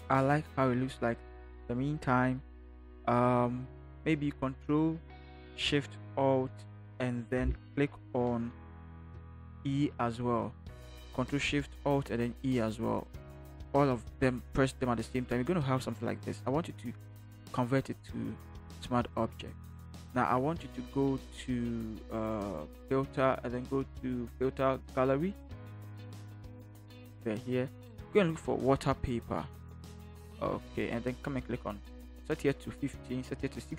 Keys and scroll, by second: 9.5 ctrl+alt+shift+e.